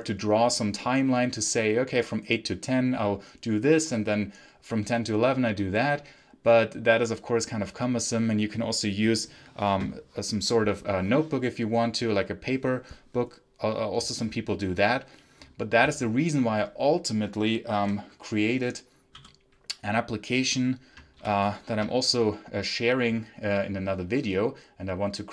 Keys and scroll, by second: 21.1 ctrl+super+l.